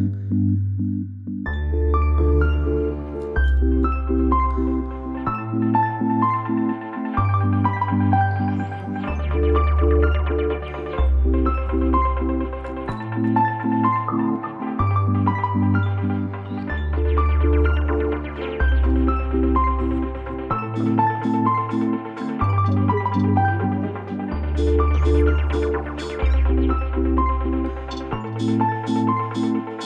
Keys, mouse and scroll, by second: 1.3 alt+scroll up 1, 4.9 click, 5.6 space, 6.1 click, 6.7 space, 7.4 alt+scroll up 1, 10.5 click, 13.3 alt+scroll up 1, 14.4 click, 16.8 space, 16.9 click, 20.6 space, 20.6 click, 20.9 space, 22.0 click, 22.1 alt+scroll up 1, 22.3 space, 22.5-27.7 drag, 27.7 click, 27.8 click, 27.8 space, 28.1 space, 28.5 alt+scroll down 1, 28.8 alt+scroll up 1, 29.0 alt+scroll down 1, 29.2 alt+scroll up 1.